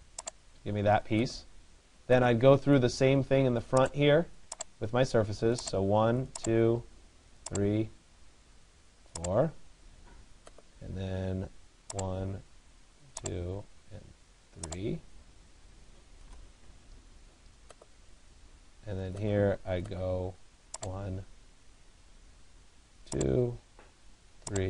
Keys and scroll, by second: 16.1 Return.